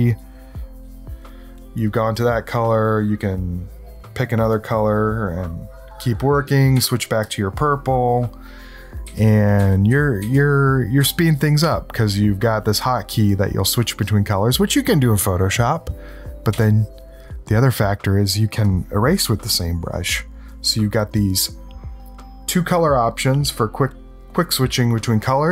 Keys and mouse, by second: 0.0-2.0 drag, 3.0-4.2 right drag, 4.5-6.5 drag, 6.7 c, 7.2-8.2 drag, 9.0 c, 9.5 c, 9.9 c, 11.0 c, 16.5 x, 18.6-20.0 drag, 20.5 click.